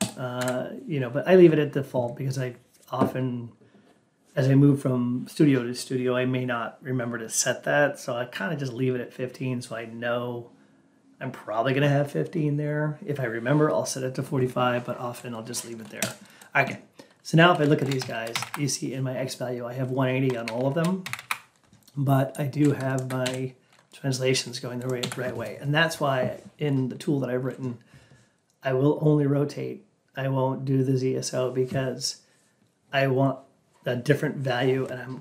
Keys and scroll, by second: 0.3 F8, 17.9 Down, 18.2 Up, 19.8 Up, 20.4 Down, 20.9 Up.